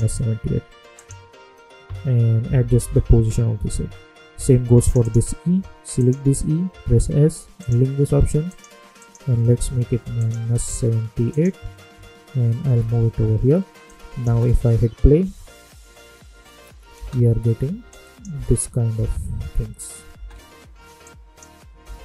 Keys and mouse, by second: 2.4 Left, 4.7 click, 6.8 s, 7.5 click, 9.8 -, 10.1 click, 12.6 Left, 13.8 click, 14.2 space, 16.9 space, 17.9 click, 18.3 space, 21.0 click, 21.8 space.